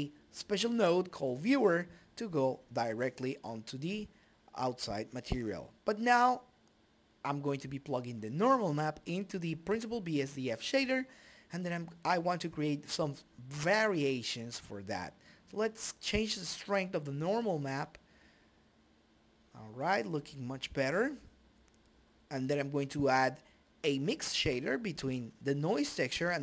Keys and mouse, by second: 1.6 click, 3.8-6.2 drag, 5.0-7.9 middle drag, 7.9 click, 10.4-12.9 drag, 12.9 middle click, 14.4 KP_2, 16.6-17.6 middle drag, 19.9 click, 20.8 right click, 21.7-24.5 drag.